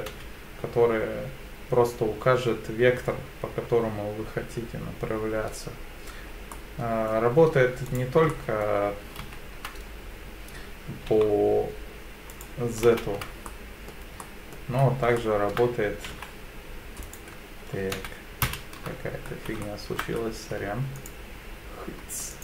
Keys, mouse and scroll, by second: 0.1 z, 6.6 middle click, 7.9 right click, 8.3 middle click, 9.2 ctrl+z, 11.1 g, 12.3 right click, 12.9 ctrl+z, 13.5 middle click, 14.2 middle click, 14.8-15.1 scroll up 2, 15.2 shift+middle click, 16.1 g, 17.1 right click, 18.0 ctrl+z, 18.5 ctrl+z, 19.3 scroll up 2, 19.6 shift+middle click, 20.1-20.6 scroll up 2, 21.0 alt+click, 22.3 alt+click.